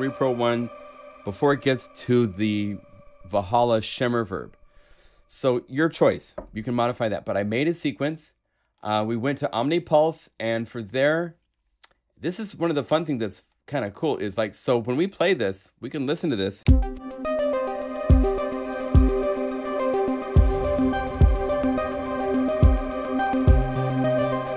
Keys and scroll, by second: 16.6 space.